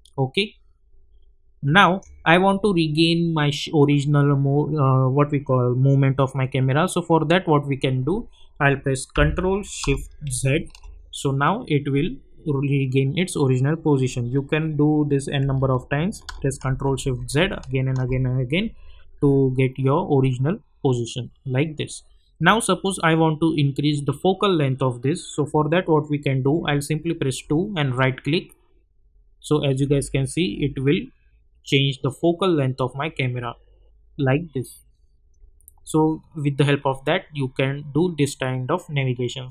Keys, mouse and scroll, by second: 0.0-2.1 typing, 3.9 typing, 10.3 ctrl+shift+z, 16.6 ctrl+shift+z, 22.3-22.9 scroll down 2, 22.9-24.0 scroll up 2, 24.0-24.6 scroll down 2, 24.6-25.0 scroll down 1, 25.0-25.6 scroll up 2, 25.6-27.3 scroll up 1, 27.4-35.3 typing, 36.2 scroll down 1, 36.7-38.6 scroll up 1.